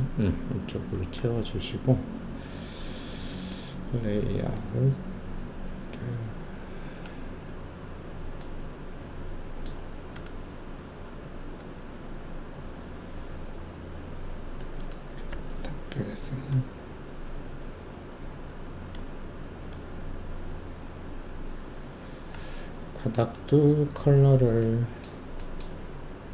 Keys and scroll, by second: 11.5 w, 15.2 shift+2.